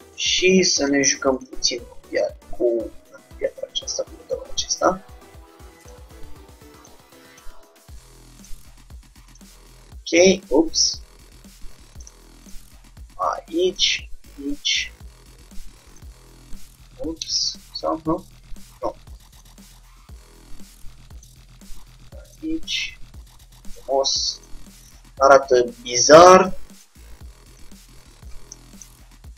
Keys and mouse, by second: 1.9 g, 5.9-9.0 drag, 6.1 g, 7.9 g, 9.3-11.0 drag, 9.6 g, 12.5-14.2 drag, 12.8 g, 14.8-16.5 drag, 15.2 g, 16.3 g, 18.7 ctrl+z, 19.4-21.1 drag, 19.8 g, 22.3-24.0 drag, 22.6 g, 24.5-26.1 drag, 28.3-29.3 middle drag.